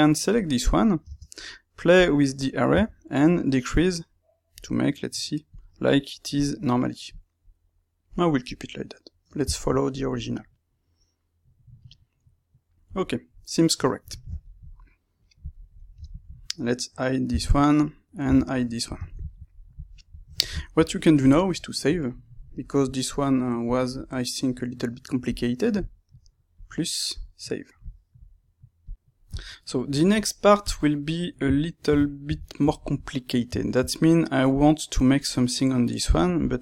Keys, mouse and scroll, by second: 0.2 click, 0.3-5.0 middle drag, 1.0 space, 5.8 middle click, 6.3 click, 6.7 middle click, 13.4-17.8 middle drag, 17.2 h, 17.8 click, 18.2 h, 18.5-21.8 middle drag, 21.8-25.3 drag, 27.2-31.0 drag, 31.0-34.4 middle drag, 34.4 click, 35.2-36.6 middle drag, 36.2 Tab.